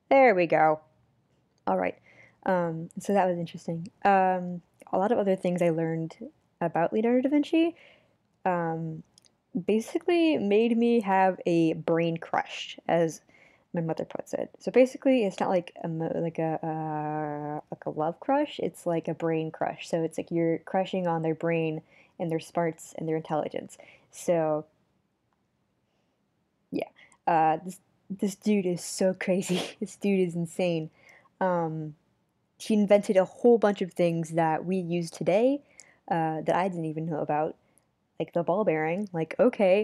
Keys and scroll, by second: 4.8 super+z, 11.4 super+z, 12.0 super+z, 27.2 super+z, 27.7 super+z, 28.6 super+z, 31.3 super+z, 32.3 super+z, 33.5 super+z, 36.2 super+z, 37.0 super+z, 38.3 super+z.